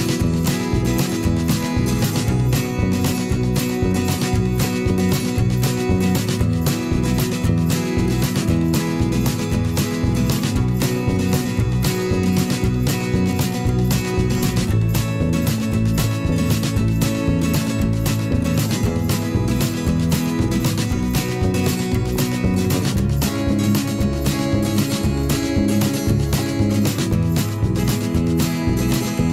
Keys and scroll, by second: 5.7 a, 16.9 v.